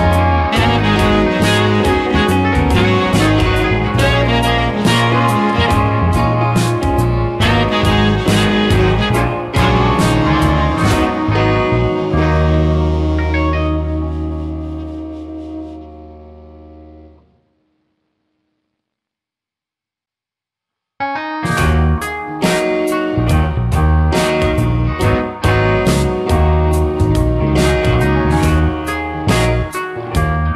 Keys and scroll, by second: 10.4 space, 19.3 space, 27.3 space.